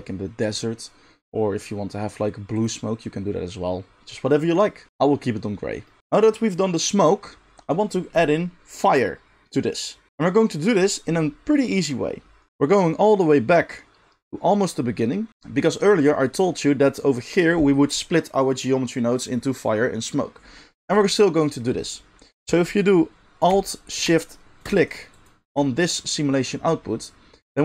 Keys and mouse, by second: 4.9 ctrl+z, 6.0-24.8 drag, 24.5 alt+shift+middle click, 24.5-26.5 alt+shift+right drag, 25.1 alt+shift+click, 25.1 alt+shift+middle click.